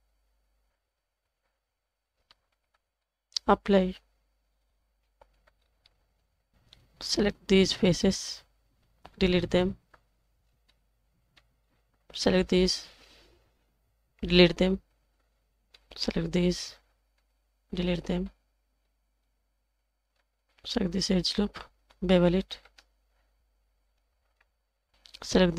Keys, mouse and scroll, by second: 0.1-1.1 drag, 2.0 click, 2.9 middle click, 4.4 click, 5.3 Tab, 5.6 scroll up 2, 5.8-6.2 middle drag, 6.5 shift+middle drag, 8.1 alt+click, 9.2 x, 10.4 scroll down 3, 10.7-11.3 middle drag, 11.6-12.0 scroll up 2, 12.3 alt+click, 14.2 x, 15.7 middle click, 16.7 l, 18.3 typing, 18.8-19.7 scroll up 1, 20.1 2, 20.9 alt+click, 22.5 ctrl+b.